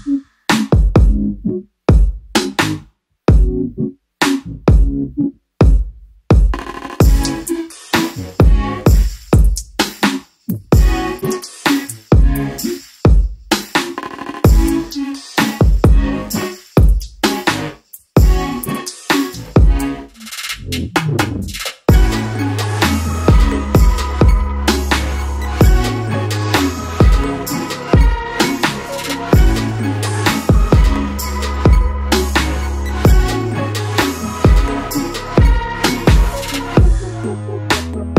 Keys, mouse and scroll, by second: 5.1 shift+click, 7.5 click, 13.3 click, 16.5 click, 18.7 click, 20.8 click, 24.5 click, 25.9 click, 30.4 click.